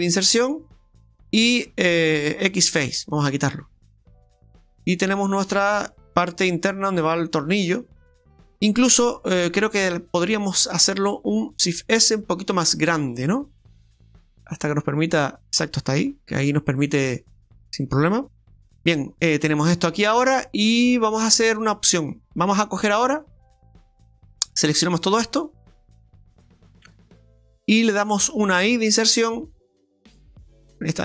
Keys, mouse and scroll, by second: 0.8 middle click, 2.5 x, 3.7 middle click, 4.8-5.5 scroll down 5, 5.2 middle click, 7.9-8.7 scroll up 6, 8.7 middle click, 10.0 right click, 10.5 alt+shift+right click, 10.7 right click, 11.7 shift+s, 12.5 shift+s, 13.7 s, 13.9 Tab, 13.9 middle click, 13.9-14.5 scroll up 2, 16.3 Tab, 16.6 scroll down 2, 16.9 middle click, 18.5 Tab, 18.6-19.3 scroll up 5, 19.4 shift+middle click, 19.9 scroll down 1, 24.7 right click, 25.4 shift+right click, 25.7 right click, 26.0 shift+right click, 26.3 shift+right click, 26.6 shift+right click, 28.3 i.